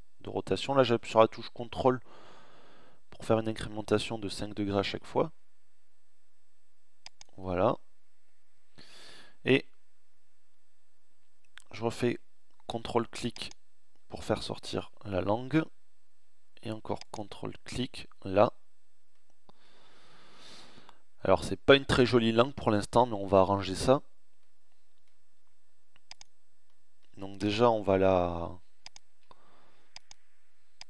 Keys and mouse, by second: 18.7 middle click, 23.0 middle click, 25.8 click, 29.7-30.8 middle drag.